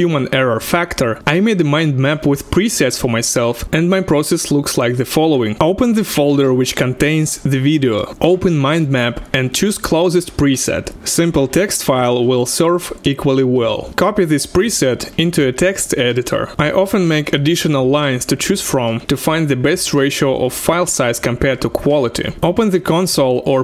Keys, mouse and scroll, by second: 5.5 click, 5.6 double click, 7.1-9.1 drag, 9.1-9.8 ctrl+scroll up 7, 10.6 click, 11.3 click, 12.6 right click, 13.9 Return, 13.9 typing, 15.0 ctrl+v, 15.0 click, 16.3 click, 16.5 ctrl+v, 16.5-18.5 drag, 18.4 KP_2, 18.5 KP_0, 18.7 ctrl+h, 18.7 double click, 19.1 Tab, 20.0 ctrl+v, 20.9 ctrl+alt+Return, 22.3 ctrl+c, 22.3 click.